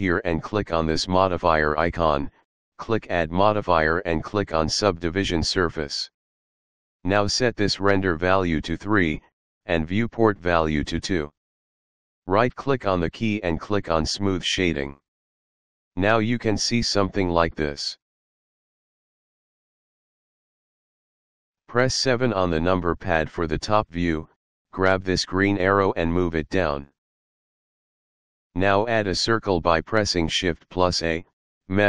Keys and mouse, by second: 1.4 click, 3.0 click, 4.8 click, 8.6 click, 10.0 click, 12.5 right click, 14.9 click, 16.1 middle click, 22.7 KP_7, 25.7 click, 29.9 shift+a.